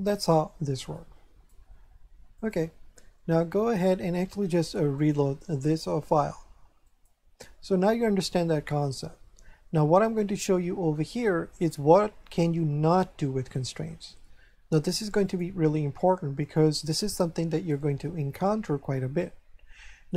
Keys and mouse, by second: 0.9 click, 2.4 click, 4.9 click, 6.8 click, 15.2 click, 17.7 shift+middle click.